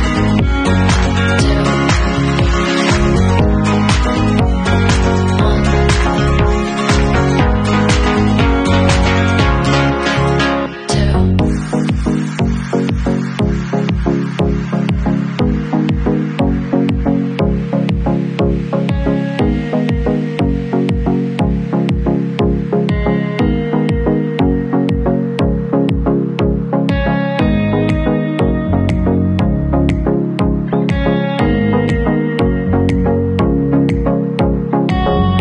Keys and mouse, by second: 3.9-5.4 middle drag, 5.5-7.0 alt+middle drag, 7.0-11.4 drag, 11.7 ctrl+s, 16.9 middle click, 20.4-29.2 alt+drag, 24.3 shift+a, 28.7 Tab, 29.2 middle click, 29.7 3, 29.8 click, 29.8-30.7 middle drag, 30.3 w, 30.7 click, 30.8-31.7 alt+middle drag, 31.7-34.4 drag, 34.4 middle click, 34.8-35.4 drag.